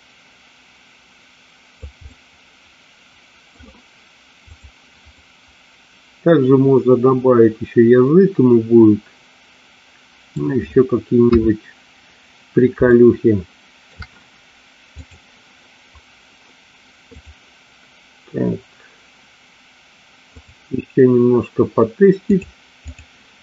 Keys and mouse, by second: 2.1-3.5 middle drag, 5.2-10.4 middle drag, 11.4 KP_3, 13.0-14.0 shift+middle drag, 15.0 click, 22.3 click.